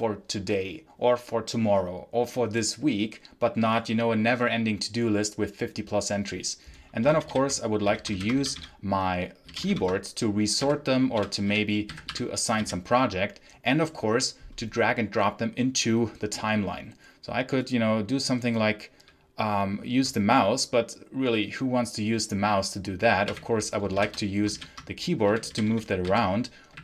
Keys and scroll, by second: 7.0 ctrl+j, 7.7 k, 8.0 ctrl+j, 8.3 k, 9.3 j, 10.5-13.0 typing, 23.2 r, 23.8 shift+j, 24.4 ctrl+j, 24.9-26.8 typing.